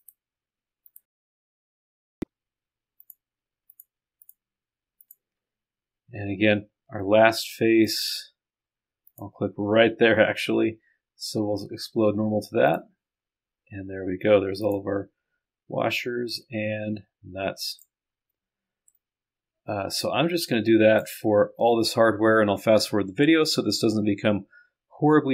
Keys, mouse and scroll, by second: 0.0 ctrl+click, 7.9 ctrl+click, 9.1 ctrl+click, 12.7 click, 13.5-14.6 scroll down 1, 14.6 click, 15.2-15.5 scroll down 1, 16.4-17.9 drag, 19.0-21.1 drag.